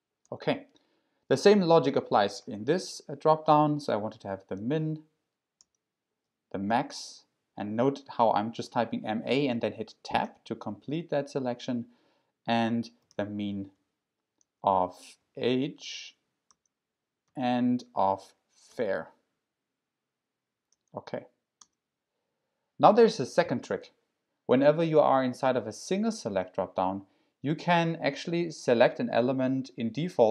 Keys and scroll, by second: 0.2 Tab, 4.3-4.6 typing, 5.6 Tab, 6.6 typing, 10.2 Tab, 12.8-13.6 typing, 13.7 Tab, 14.4 Tab, 15.0-15.7 typing, 16.5 Tab, 17.0-17.8 typing, 18.7 Tab, 20.7 Tab, 21.6 Tab.